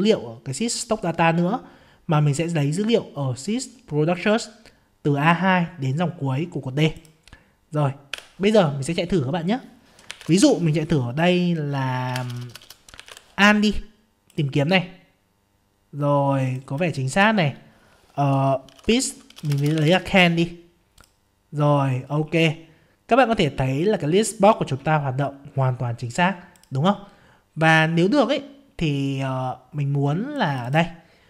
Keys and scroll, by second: 8.1 F5.